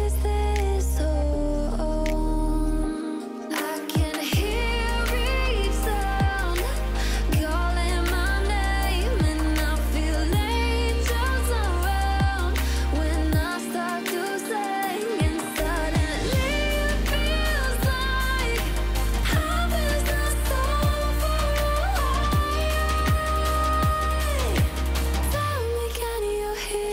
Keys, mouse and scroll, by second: 4.9-6.5 drag, 21.7 click, 26.2 click.